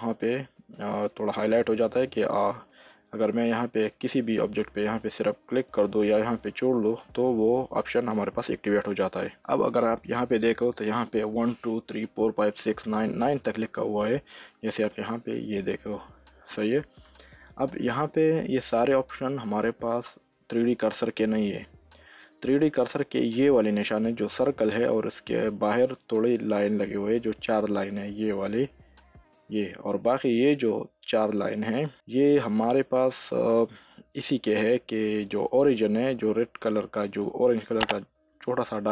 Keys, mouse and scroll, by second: 7.9 s, 10.7 shift+s, 13.8 s, 15.1 s, 21.3 shift+s, 32.9 s.